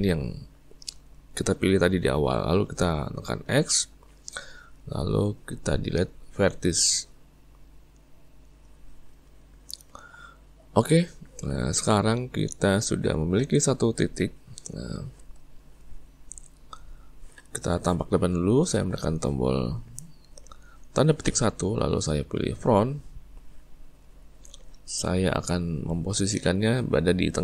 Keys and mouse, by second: 11.3 click, 12.0-18.9 middle drag, 21.3 `.